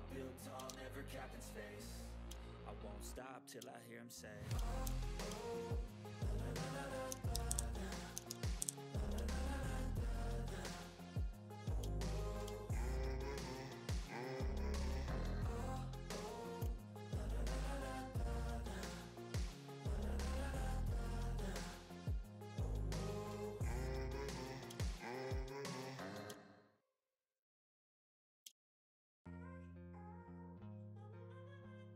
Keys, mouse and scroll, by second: 0.5 click, 0.6 ctrl+z, 2.0 click, 2.3 ctrl+scroll up 1, 2.9-3.3 ctrl+scroll down 1, 3.3 ctrl+middle click, 3.4 typing, 3.6 ctrl+scroll down 1, 4.2 click, 4.8 ctrl+g, 5.0 click, 5.3 ctrl+scroll down 1, 5.9 click, 6.0 scroll down 1, 6.2 click, 6.8-9.1 typing, 7.8 click, 8.9 click, 9.2-9.5 ctrl+scroll down 1, 9.6 ctrl+middle click, 10.0 click, 10.1 right click, 10.5 click, 11.4 scroll down 1, 11.5 middle click, 11.9 ctrl+scroll up 1, 12.2 ctrl+middle click, 12.5 ctrl+scroll up 1, 12.6 scroll down 1, 13.1 click, 15.0-15.8 typing, 15.1 click, 17.2-18.9 shift+drag, 17.5 typing, 23.0 click, 24.7 ctrl+scroll down 1, 25.2-25.5 ctrl+scroll up 1, 26.2 ctrl+scroll up 1, 28.4 ctrl+scroll up 1, 28.4 ctrl+scroll down 1, 28.8 ctrl+scroll up 1, 29.8-30.1 ctrl+scroll down 1, 30.4 ctrl+scroll down 1.